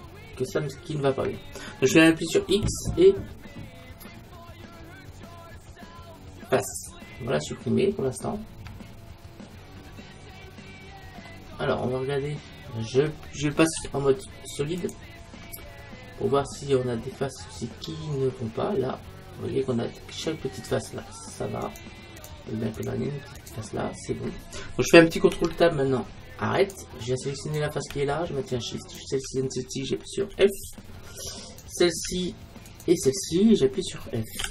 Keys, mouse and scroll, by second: 0.4 middle click, 0.6-2.3 scroll up 1, 2.3 scroll up 1, 2.5 x, 7.4-9.2 middle drag, 11.6 middle click, 13.9 z, 15.4-19.3 middle drag, 21.7-25.4 right drag, 25.4 ctrl+Tab, 27.5-34.5 right drag, 30.4 f.